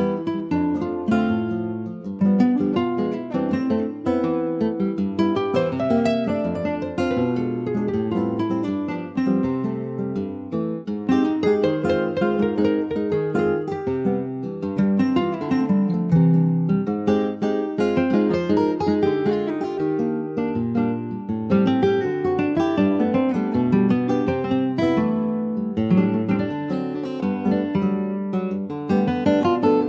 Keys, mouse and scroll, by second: 0.1 ctrl+z, 0.9 click, 1.3 scroll up 1, 1.7 click, 2.1 alt+shift+click, 2.6 middle click, 3.2 ctrl+b, 5.2 Tab, 5.3 click, 5.6 scroll down 4, 5.8 middle click, 6.4 ctrl+s, 6.8 middle click, 7.7-8.1 scroll down 2, 8.1 ctrl+s, 8.2 click, 8.6-10.7 middle drag, 10.7 ctrl+s, 11.2 middle click, 11.6 ctrl+s, 11.9 shift+middle click, 12.4 click, 12.7 middle click, 13.0 scroll up 2, 13.1 Tab, 13.5 click, 14.6 3, 14.7 click, 14.9-15.2 scroll down 3, 15.2 alt+middle click, 15.5 alt+middle click, 16.3 scroll down 2, 16.6 shift+middle click, 16.8-17.4 shift+scroll up 3, 17.4 e, 21.2 shift+middle click, 21.8 e, 22.9-23.7 scroll down 5, 23.7 click, 25.7-26.2 scroll up 1, 26.3 click, 28.1 ctrl+s, 28.2 middle click, 28.4 scroll up 3, 28.9 click, 29.5 alt+shift+click.